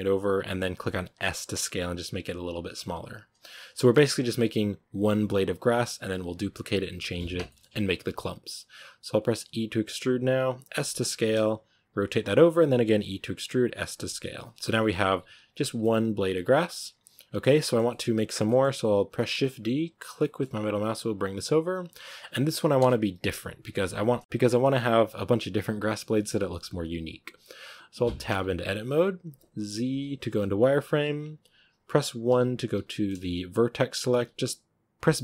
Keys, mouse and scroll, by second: 1.1 s, 3.6-9.3 shift+middle drag, 9.3 e, 10.9-15.1 typing, 14.5 Tab, 14.9 Tab, 15.5 Tab, 15.6 scroll down 3, 15.7-19.1 middle drag, 19.1 shift+d, 22.7 KP_1, 23.5 KP_3, 24.2-25.6 shift+middle drag, 25.6 scroll up 1, 28.2 Tab, 30.2 z, 32.1 1, 34.9 b.